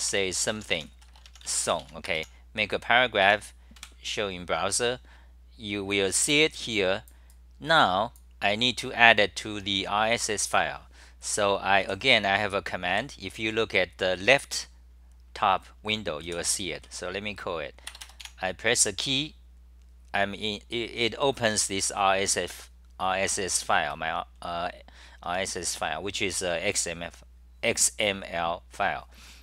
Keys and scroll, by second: 1.9 Home, 3.4 Home, 3.8 super+r, 11.9 w, 13.6 c, 16.3 g, 16.8 c, 25.3 6, 25.5 6, 25.8 6.